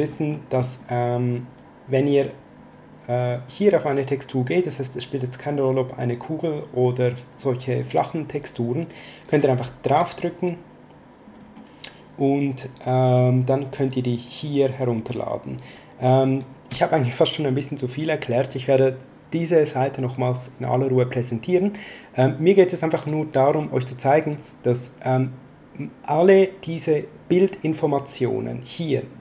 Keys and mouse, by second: 9.8 click, 16.2 click.